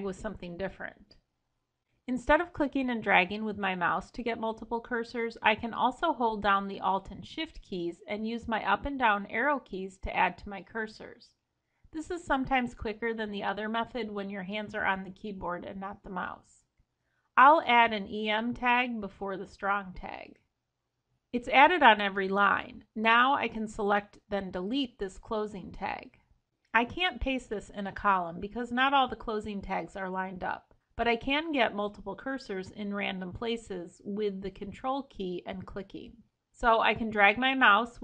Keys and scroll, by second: 1.2 Escape, 8.2 alt+shift+Down, 24.0 ctrl+shift+Right, 26.0 ctrl+x, 33.8 Escape.